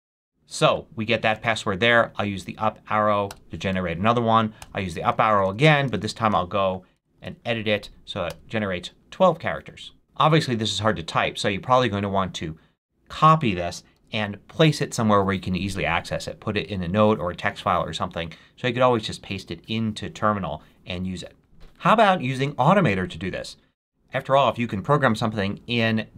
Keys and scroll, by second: 1.8 Up, 3.2 Return, 4.5 Up, 5.0 Left, 6.8-7.6 typing, 8.2 Return, 13.9 super+c.